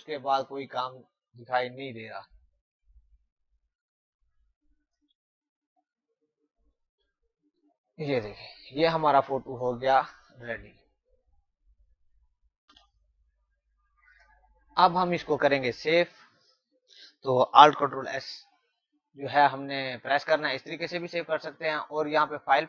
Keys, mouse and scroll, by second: 0.0-0.5 typing, 0.1 click, 0.9 click, 4.4 space, 4.6 click, 4.8 space, 5.3 click, 7.3-8.0 typing, 10.7 click, 12.7 End, 16.1 ctrl+alt+Num_Lock, 19.5 ctrl+alt+s, 20.8 click.